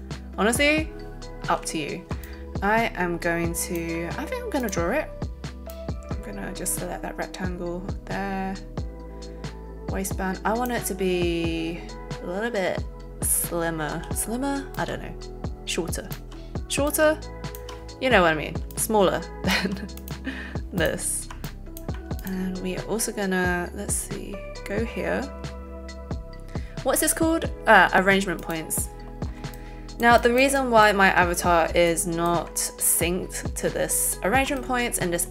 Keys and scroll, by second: 13.9 a.